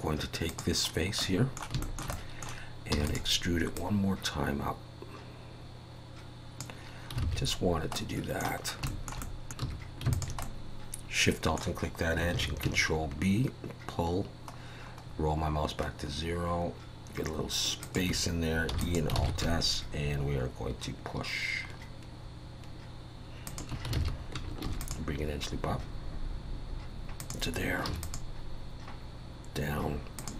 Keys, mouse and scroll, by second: 0.5 click, 0.9 scroll down 3, 1.2 middle click, 1.8 shift+middle click, 2.1 middle click, 2.9 e, 3.8 click, 7.3 alt+a, 8.0 middle click, 8.6 scroll up 2, 8.9 shift+middle click, 9.2 middle click, 9.6 2, 10.1 alt+shift+click, 10.4 middle click, 12.3 ctrl+b, 18.7 e, 19.3 alt+s, 23.9 alt+a, 24.6 ctrl+r, 28.0 ctrl+r.